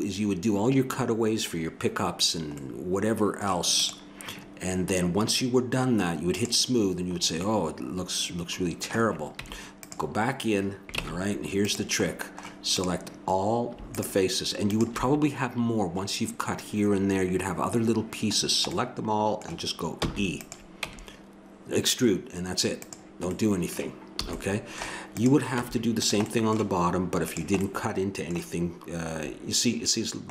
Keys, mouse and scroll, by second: 2.7 middle click, 3.8-5.7 drag, 6.3-7.5 drag, 7.5 middle click, 9.4 Tab, 11.0 ctrl+Tab, 12.8-18.4 drag, 20.0 e, 20.8 Tab, 24.4 a, 25.2 click, 25.5 Tab, 30.0 middle click.